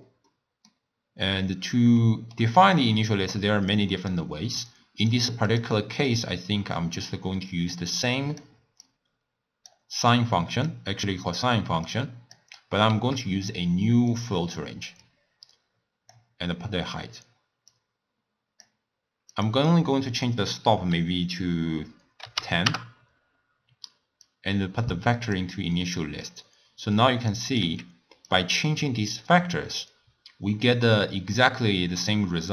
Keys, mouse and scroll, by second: 0.3-1.5 middle drag, 1.5-2.0 scroll down 2, 2.0-3.7 middle drag, 3.7 click, 5.5 click, 6.0 click, 7.5 drag, 8.8 click, 10.1 click, 11.9 click, 13.1 shift+d, 15.0 drag, 17.7 drag, 19.3-22.3 drag, 24.2 drag, 25.8-27.5 middle drag, 27.5 click, 27.9 x, 28.3-31.3 drag.